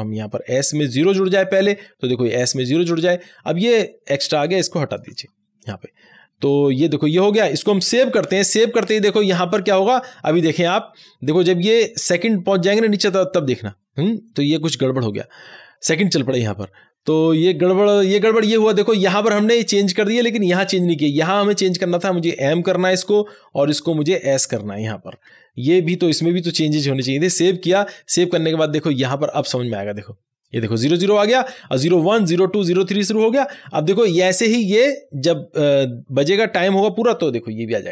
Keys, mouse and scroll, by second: 1.5 s, 2.3 click, 2.7 s, 3.6-5.1 drag, 5.1 BackSpace, 6.9 click, 8.0 ctrl+s, 21.6 ctrl+s, 21.7 click, 22.9 m, 24.0 click, 25.1 s, 26.5 click, 27.3 ctrl+s.